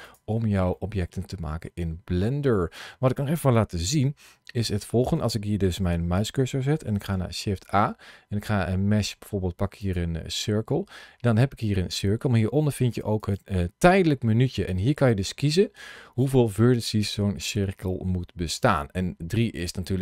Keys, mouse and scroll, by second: 0.6 middle click, 2.4 middle click, 4.4 shift+right click, 13.1 click, 14.5 click.